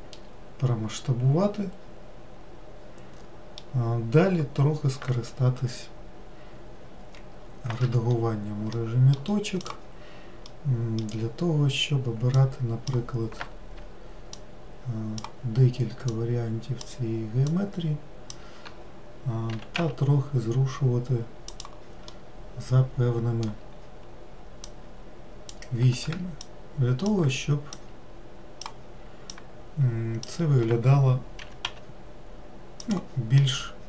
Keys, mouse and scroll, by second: 8.1 1, 9.0 middle click, 9.9 click, 10.8-12.6 middle drag, 12.6 click, 14.6 shift+click, 16.3 shift+click, 17.7 shift+click, 19.8 g, 22.4-24.9 middle drag, 24.9 click, 26.7 shift+click, 28.0 shift+click, 29.6 shift+click, 31.7 g, 33.7-33.8 middle drag.